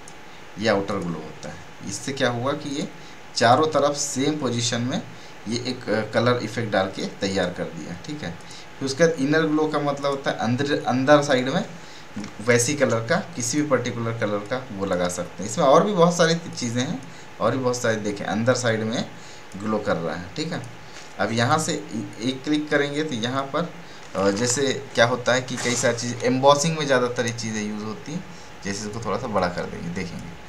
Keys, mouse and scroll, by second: 0.0 click, 8.3 click, 12.8 Return, 13.4-26.5 drag, 28.8-30.4 drag.